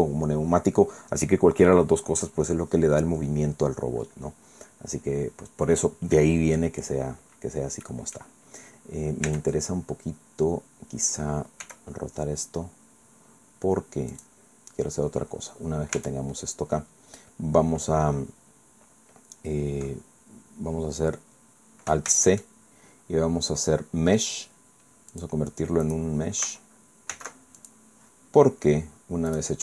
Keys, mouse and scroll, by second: 3.9 scroll up 1, 4.3 scroll down 1, 4.8-5.1 scroll up 1, 7.9 click, 9.3 Tab, 11.7 r, 14.1 click, 14.6-14.9 scroll up 1, 15.1 scroll down 1, 15.9 Tab, 16.5-16.8 scroll down 1, 17.8-18.1 scroll down 2, 22.1 alt+c, 25.1 click, 25.9 right click, 27.1 alt+c, 27.6 alt+click, 29.3 click.